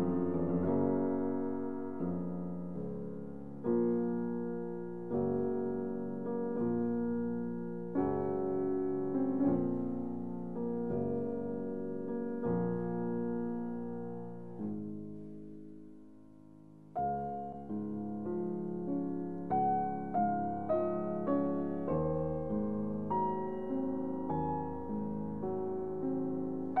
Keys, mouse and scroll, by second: 5.4 x, 7.2 click, 7.2 click, 8.9-15.8 middle drag, 15.7 click, 15.8 click, 18.8 shift+click, 22.7-26.8 middle drag.